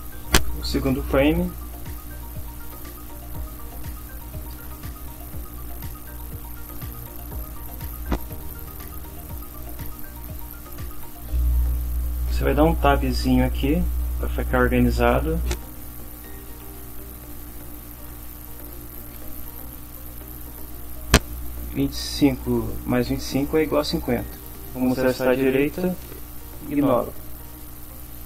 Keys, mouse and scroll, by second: 1.9-4.0 typing, 4.5 shift+Return, 5.2 Up, 6.4 End, 6.7 Return, 10.1 Tab, 16.1-20.3 typing, 27.0 End, 27.9 Return.